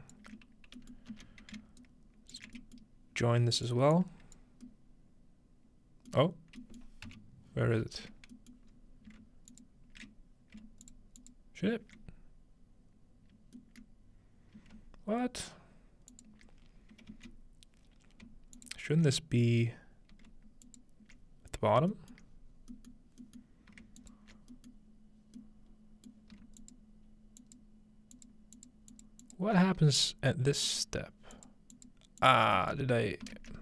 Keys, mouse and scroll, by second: 0.4-1.6 drag, 1.1 x, 1.8-2.9 ctrl+shift+right drag, 3.2-4.4 ctrl+shift+middle drag, 3.6-5.9 drag, 6.2-7.7 scroll down 2, 7.7-10.5 scroll up 3, 9.5 alt+shift+click, 10.9 alt+shift+click, 11.2 alt+shift+click, 12.0-13.1 alt+shift+drag, 13.9 middle click, 16.1-17.8 alt+shift+drag, 17.1 z, 18.6-20.2 alt+shift+drag, 20.7 alt+shift+click, 22.3 middle click, 22.5-24.3 scroll up 1, 23.0-24.5 shift+middle drag, 24.0-25.5 alt+shift+drag, 24.7-25.0 alt+shift+middle drag, 26.6-28.7 alt+shift+drag, 28.9 alt+shift+drag, 29.2 alt+shift+click, 30.7 alt+shift+click, 31.3 alt+shift+click, 31.7 alt+shift+click, 32.2 alt+shift+click, 32.8 scroll down 2, 33.5 scroll down 1.